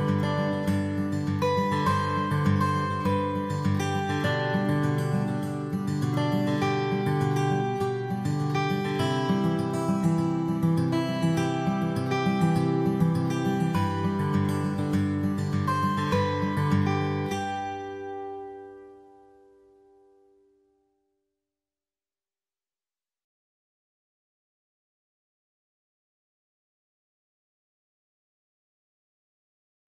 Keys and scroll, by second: 12.7 ctrl+z, 13.4 ctrl+z.